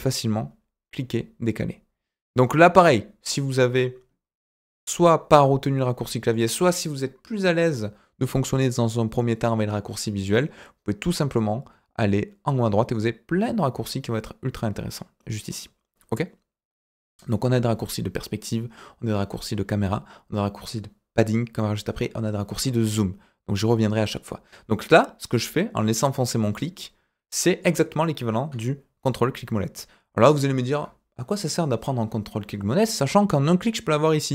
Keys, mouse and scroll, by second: 22.7-25.0 drag, 25.2-27.6 drag, 29.0-30.7 ctrl+middle drag.